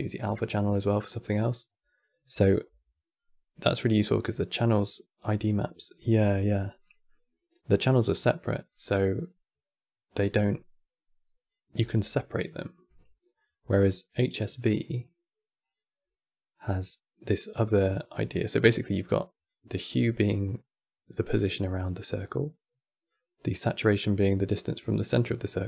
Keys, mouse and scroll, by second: 3.3 click, 6.5 click, 11.5 click, 12.3-14.2 middle drag, 14.2 click.